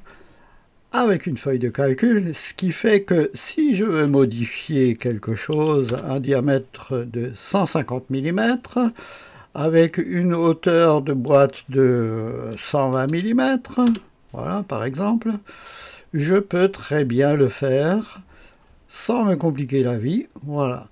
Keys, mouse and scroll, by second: 3.6 click, 4.8-5.7 typing, 5.9 Return, 11.0 click, 12.5-13.1 typing, 13.9 Return, 17.9-19.4 scroll down 1, 19.4-20.9 drag.